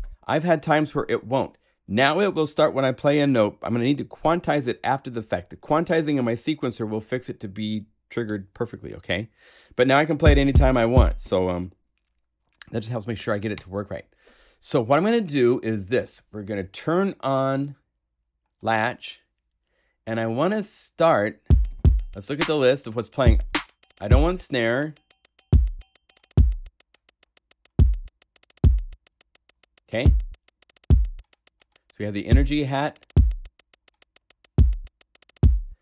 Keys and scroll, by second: 13.5 0.